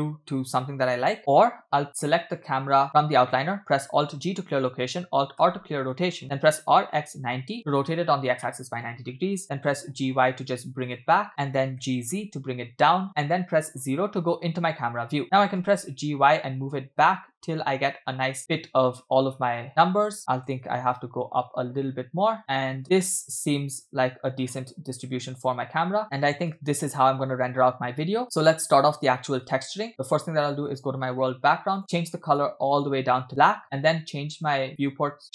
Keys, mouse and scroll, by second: 0.0 middle click, 0.6 shift+middle click, 2.7 click, 4.0 alt+g, 5.9 alt+r, 6.5 r, 8.5-8.9 shift+middle drag, 9.5 g, 11.1-11.5 middle drag, 11.8 g, 13.9 KP_0, 15.4 g, 20.4 g, 22.8 space, 24.5-25.2 scroll down 1, 25.2-26.0 scroll down 1, 26.0-26.6 scroll up 4, 26.0 space, 26.6 space, 27.4-27.8 scroll down 3, 27.8-28.2 scroll up 2, 28.5 space, 29.7 space, 30.7 click, 31.8 click.